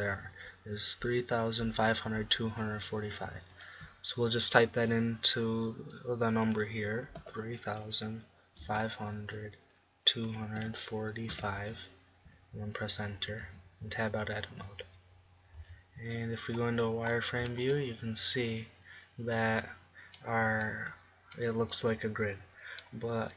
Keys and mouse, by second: 4.2-6.0 middle drag, 15.8 Tab, 16.7 z, 17.9 middle click, 19.7-21.8 middle drag, 22.7 middle click.